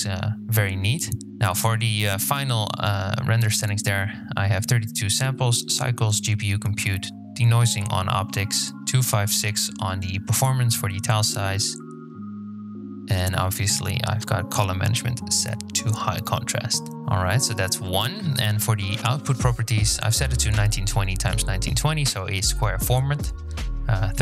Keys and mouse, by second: 2.7 click, 5.3 click, 7.0 click, 12.3 click, 13.4 click.